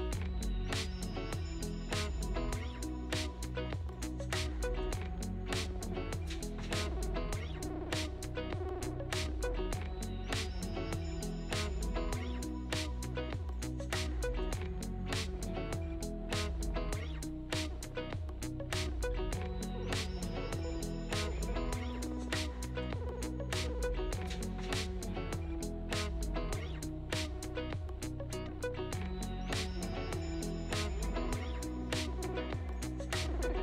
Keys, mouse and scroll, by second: 0.1-0.7 scroll down 2, 2.8 scroll down 1, 3.1-5.3 shift+middle drag, 5.3-8.7 typing, 10.9-12.4 drag, 15.6 scroll up 3, 17.5-19.3 scroll down 5, 19.3 click, 19.7 shift+click, 21.5 click, 22.3 click, 25.8 KP_1, 27.4 shift+a, 29.3 KP_0, 29.9-33.6 ctrl+middle drag.